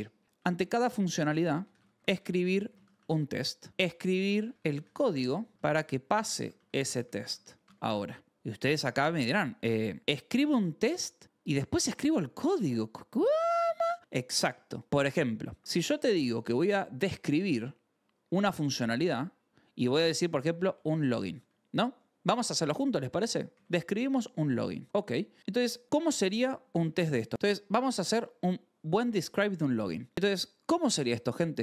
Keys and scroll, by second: 0.0-7.6 typing, 8.7 0, 9.4 e, 17.7 Return, 18.8 BackSpace, 19.8 Return, 20.1-22.5 typing, 23.5 ctrl+s, 24.0 a, 24.7 shift+[, 24.9 Return, 25.4 Return, 25.8 Down, 26.1 Up, 26.7 Escape, 26.8-31.6 typing, 30.1 Escape.